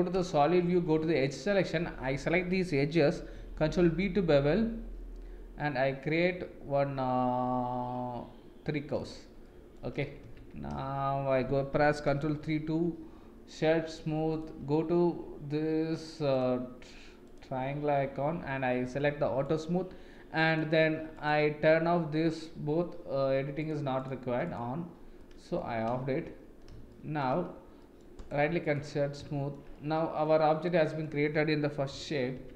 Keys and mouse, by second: 0.7 2, 3.4 ctrl+b, 9.4 middle click, 10.3 Tab, 12.4 ctrl+3, 14.3 click, 16.3 click, 17.3-17.7 drag, 19.4 click, 20.5 click, 23.6 click, 24.0 click, 24.5 click, 25.2-25.6 middle drag, 26.9 shift+middle click, 27.8 middle click, 28.3 right click, 29.3 shift+middle click, 29.7-31.0 middle drag, 31.9 KP_1, 32.4 Tab.